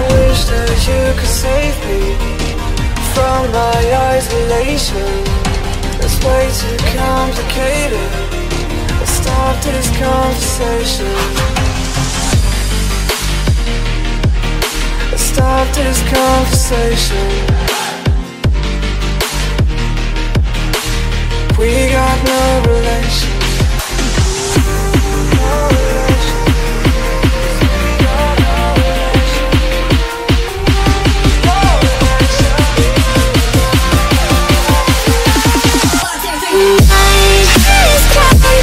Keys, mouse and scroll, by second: 0.7 click, 1.3 click, 1.5 middle click, 2.3 click, 2.9 right click, 4.3 scroll, 4.9-5.5 scroll, 6.1 click, 6.4 middle click, 6.5 middle click, 7.1 middle click, 7.1 middle click, 7.7 click, 8.8 click, 10.6 click, 11.9 click, 13.6 click, 14.2 click, 16.2 click, 17.0 click, 18.6 click, 24.3 click, 25.3-28.9 drag, 30.6 click, 32.0 click, 32.8 click, 34.9 click, 35.1 click, 36.3 click.